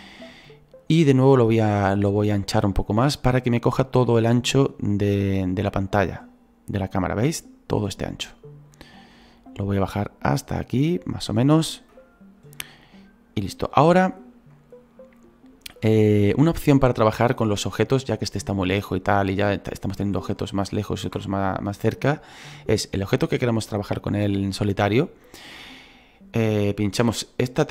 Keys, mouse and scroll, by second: 9.6-19.0 drag, 19.0 shift+middle click, 19.2 scroll up 1, 19.7-27.7 shift+middle drag.